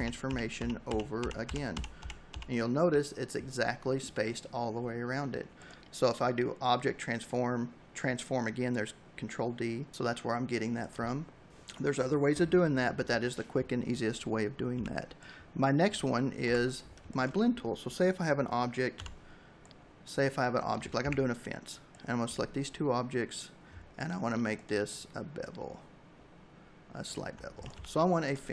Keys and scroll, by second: 13.5 v, 15.2 Delete, 15.8 space, 17.8 m, 19.8 a, 26.3 v.